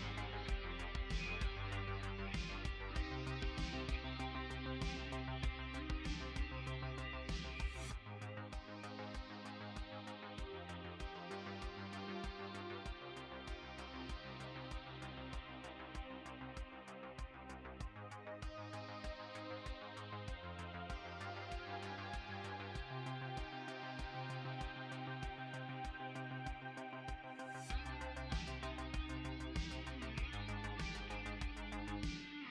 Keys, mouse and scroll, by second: 0.1 ctrl+s, 1.0 middle click, 2.7 middle click, 6.5 Tab, 10.3 middle click, 13.1 click, 14.8 click, 19.4 click, 20.2 click, 21.7 click, 23.1 middle click, 26.6 r.